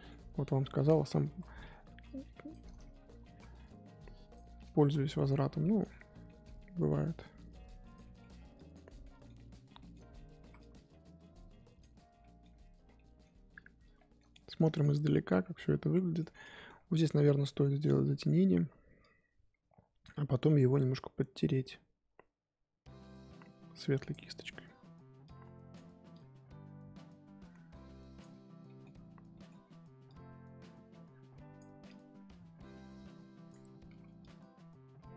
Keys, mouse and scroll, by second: 0.4 click, 1.2 ctrl+z, 2.1 click, 2.9 ctrl+z, 3.6-4.8 drag, 4.8 ctrl+z, 5.0 middle click, 5.3 scroll up 1, 5.4 scroll down 1, 5.6 middle click, 6.5-7.1 scroll up 1, 7.1 click, 8.0 middle click, 8.5 click, 9.0-10.6 middle drag, 10.6-12.2 drag, 12.2 middle click, 12.6-12.9 scroll down 8, 12.9 middle click, 13.5-14.1 scroll up 5, 14.1 middle click, 14.4 scroll up 3, 14.7 shift+middle click, 15.4 scroll up 1, 15.6-16.7 middle drag, 16.7-17.1 scroll up 1, 17.1 scroll down 1, 17.2 middle click, 17.6 scroll up 1, 19.0-20.1 drag, 20.1 middle click, 20.9-24.2 drag, 24.2-25.2 middle drag, 25.2-28.4 drag, 28.4 scroll down 4, 28.6 middle click, 28.9-29.6 scroll up 4, 29.3 middle click, 29.6 x, 30.0-35.1 drag.